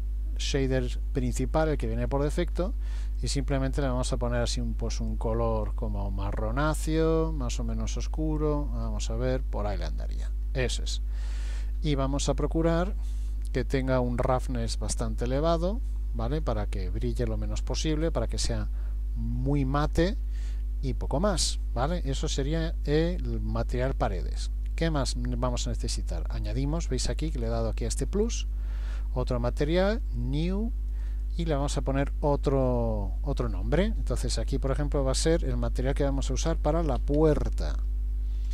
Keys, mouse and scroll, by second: 1.8-2.7 scroll down 2, 3.1 click, 11.5-12.1 scroll down 1, 14.2 click, 19.8-20.5 scroll down 5, 20.2-21.3 scroll up 7, 21.3-22.8 scroll up 3, 23.0-24.1 scroll up 2, 24.7 click, 30.1 click, 30.9 click.